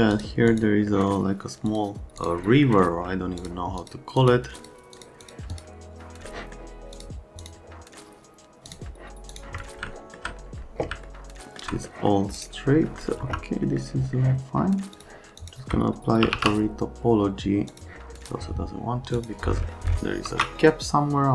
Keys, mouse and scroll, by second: 0.1-0.5 scroll up 2, 0.9 scroll down 1, 1.7 click, 2.2 click, 2.6 right click, 2.8 middle click, 3.4 click, 3.8 click, 4.2 click, 4.6 click, 4.9 click, 5.2 click, 5.5 click, 6.2 middle click, 7.0 click, 7.4 click, 8.7 click, 9.3 click, 9.9 alt+middle click, 11.0 alt+middle click, 11.8 middle click, 12.3 right click, 13.2 F3, 13.6 right click, 14.9 click, 15.4 click, 15.9-16.8 typing, 17.7 click, 18.2 click, 19.2 click, 19.7 middle click, 20.2 ctrl+a.